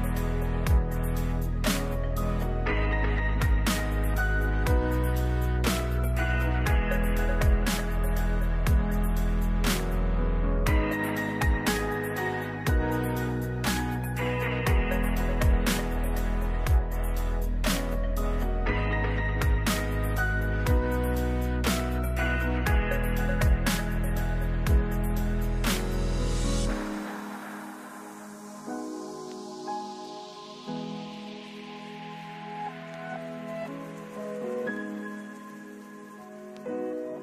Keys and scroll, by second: 0.6 ctrl+z, 14.2 space, 24.1 ctrl+s, 36.9 ctrl+s.